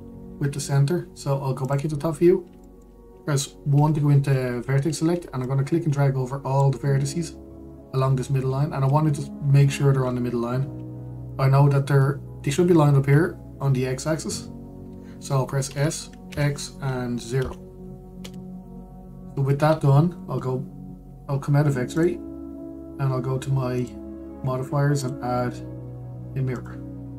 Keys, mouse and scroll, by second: 0.3-2.3 middle drag, 2.3 click, 3.3-4.4 shift+middle drag, 4.4 1, 5.1-6.1 scroll up 1, 6.1 click, 9.4 scroll up 1, 10.3-11.8 scroll down 1, 16.4 s, 19.1 Tab, 22.6-24.5 drag.